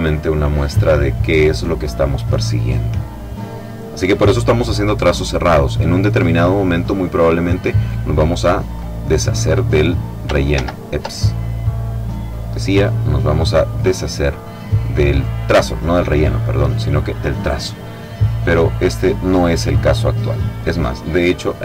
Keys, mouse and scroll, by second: 7.0 click, 8.4 click, 10.2 ctrl+z, 12.5 click, 14.8 click, 18.1 click, 19.3 click, 21.1 click.